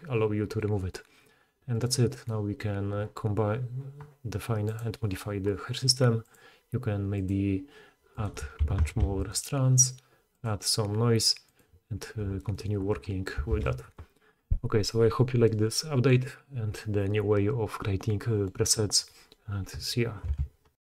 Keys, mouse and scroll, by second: 1.7 click, 1.8-4.8 middle drag, 4.8-9.3 drag, 8.8 2, 9.3-10.4 middle drag, 10.4-20.8 drag, 13.4 alt+a.